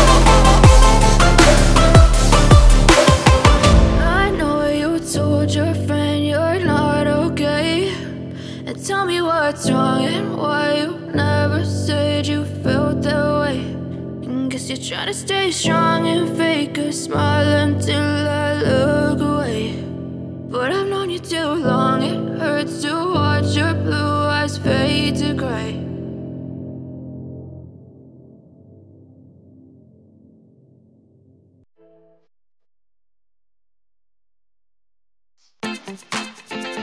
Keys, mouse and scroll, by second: 4.4-5.3 typing, 13.9 ., 14.8 Return, 18.2-19.1 typing, 21.3 Return, 21.4 scroll up 1, 21.7 middle click.